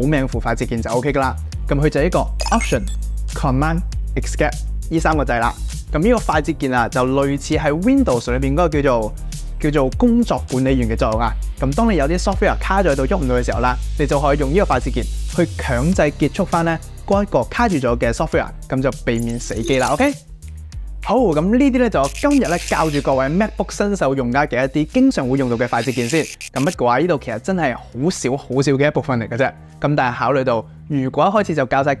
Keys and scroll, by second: 3.6 alt+super+Escape.